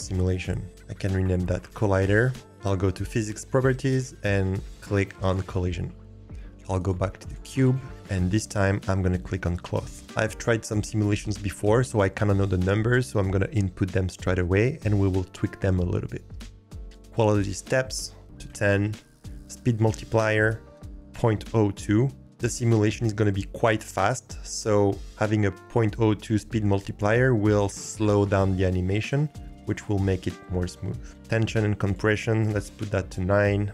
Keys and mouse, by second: 0.7 click, 0.7 l, 7.4 click, 9.9-18.8 drag, 20.2-22.2 drag, 31.6-33.7 drag.